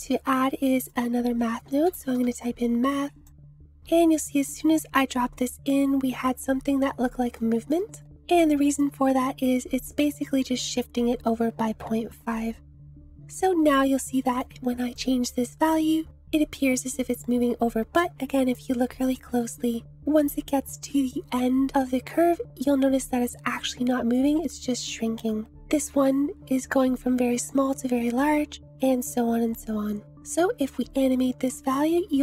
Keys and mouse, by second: 0.2 shift+a, 7.4 shift+click, 13.7 click, 14.4 click, 24.2 click, 30.2-32.2 drag.